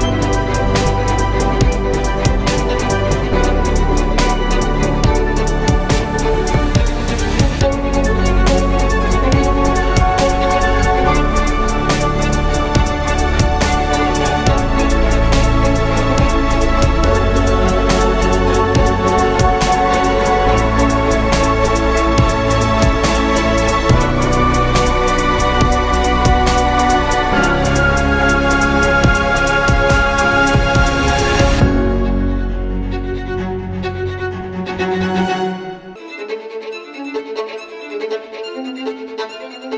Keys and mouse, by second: 9.5 shift+a, 12.7 s, 14.1 s, 16.2 KP_3, 19.1 s, 21.2 s, 23.3-24.0 middle drag, 24.0 s, 31.0 Tab, 31.9 Tab, 32.7 shift+s, 34.2 shift+a, 35.7 KP_3, 37.6 s.